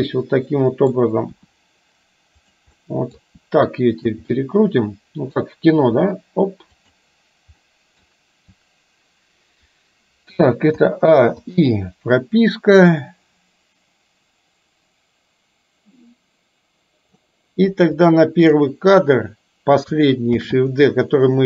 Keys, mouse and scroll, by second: 1.4 r, 2.8-3.2 middle drag, 3.4 r, 4.4-5.4 middle drag, 5.9 r, 7.7 middle click, 10.8 a, 11.4 i, 12.8-17.2 drag, 18.0 click, 20.4 shift+d.